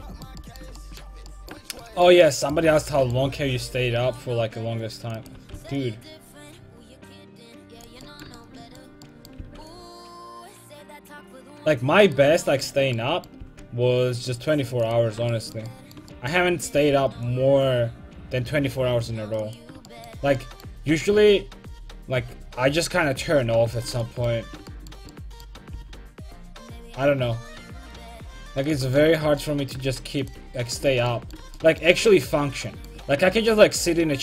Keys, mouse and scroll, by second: 3.3 c, 5.3-7.8 right drag, 5.4 a, 5.6 c, 8.1 middle click, 9.5 c, 13.5 c, 16.9 c, 21.2 c, 25.8 c, 28.8-30.8 drag, 30.3-32.0 right drag, 32.0-33.2 middle drag.